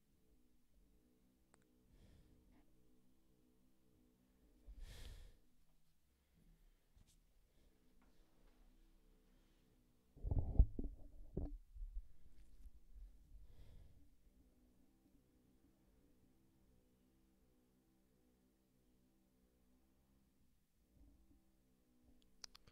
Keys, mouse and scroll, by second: 0.5 scroll up 1, 2.8-3.7 scroll up 1, 3.7 scroll up 2, 15.1 scroll up 1, 20.9 scroll down 1, 22.0 scroll up 4.